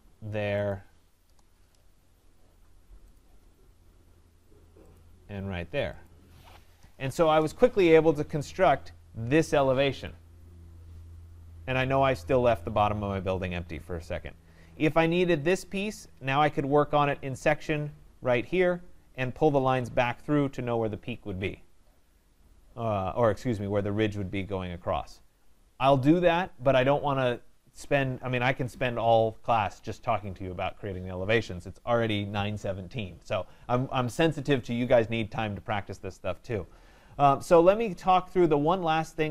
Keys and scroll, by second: 1.2 Return, 6.8 Return.